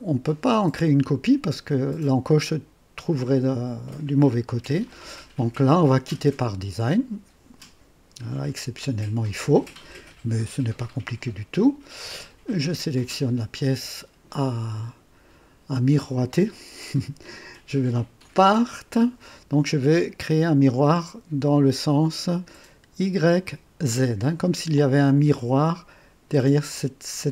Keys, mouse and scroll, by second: 2.9-4.9 drag, 12.4 click, 16.7 click, 18.1 click.